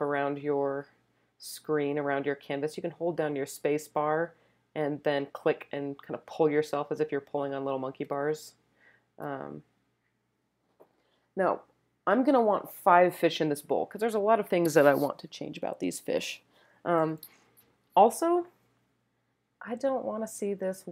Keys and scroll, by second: 8.0-8.8 typing.